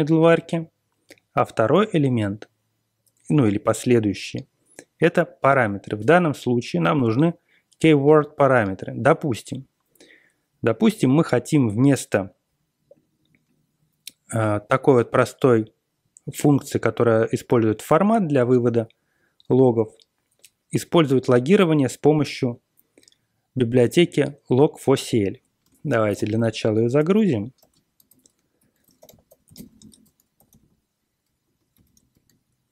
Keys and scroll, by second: 25.6-30.0 typing, 26.9 Return, 31.1-32.6 typing, 32.6 Return.